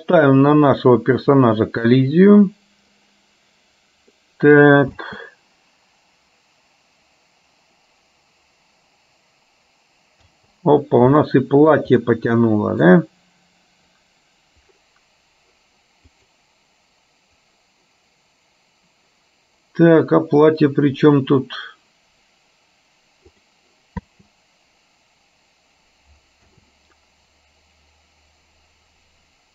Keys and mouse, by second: 0.5 click, 4.3 middle click, 5.1 space, 10.4 space, 11.3 shift+middle click, 12.0 middle click, 16.3 click, 23.5 click, 24.3 space.